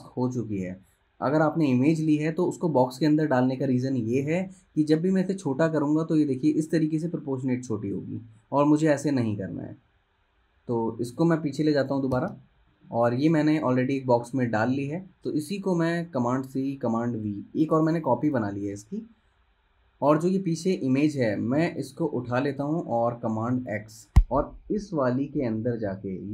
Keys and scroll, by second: 9.7 super+z, 12.3 shift+super+[, 14.6 super+z, 16.4 super+c, 17.3 super+v, 22.2 super+z, 23.8 super+x.